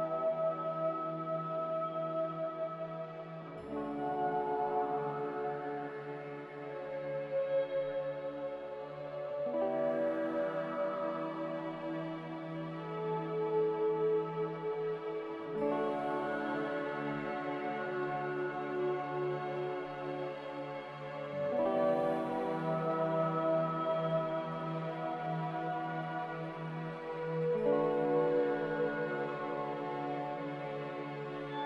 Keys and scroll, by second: 2.8-4.1 typing, 5.9 typing, 19.7 s.